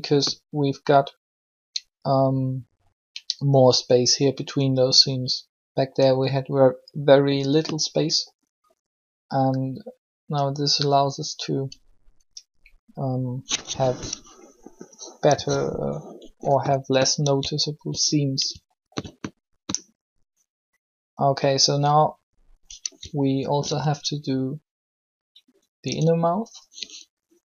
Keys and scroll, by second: 15.2 3, 25.8 Tab.